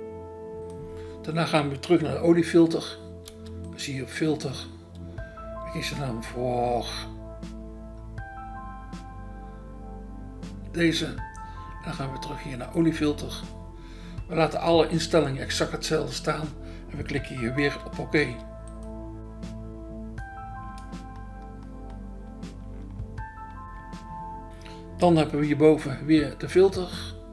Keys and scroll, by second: 4.3 BackSpace, 17.7 BackSpace, 18.2 BackSpace.